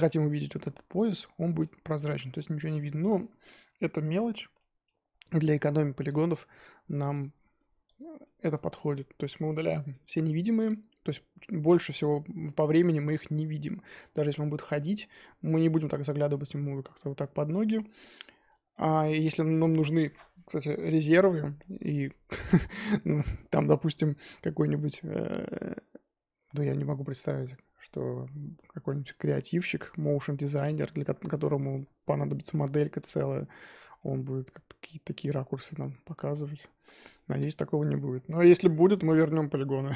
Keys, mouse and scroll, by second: 0.5 click, 0.8 scroll down 2, 1.1-2.5 middle drag, 2.5-3.2 scroll down 7, 2.9 click, 3.2-5.5 middle drag, 5.5-7.2 scroll up 7, 7.2-7.8 scroll up 1, 7.8 click, 8.2-13.6 shift+middle drag, 14.9-18.0 middle drag, 18.9 scroll down 2, 19.1-21.4 middle drag, 21.4-21.9 scroll up 4, 22.0-24.0 middle drag, 24.0 click, 28.8-33.7 middle drag, 33.7 scroll up 2, 34.0-36.3 middle drag, 36.3 scroll down 3, 36.5-37.9 middle drag, 37.9-38.2 scroll up 1, 38.2-39.9 middle drag.